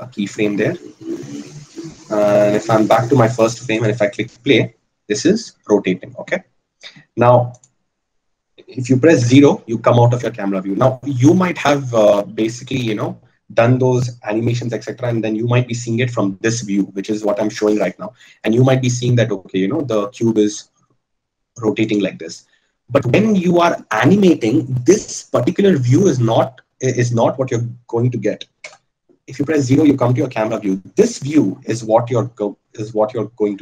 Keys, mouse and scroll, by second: 8.1 click, 9.5 KP_0, 29.5 KP_0.